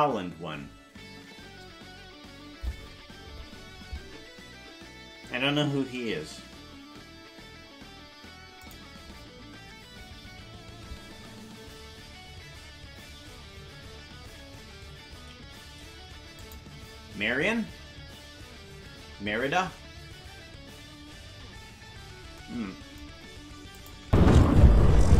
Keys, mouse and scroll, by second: 23.8 click, 24.0 space.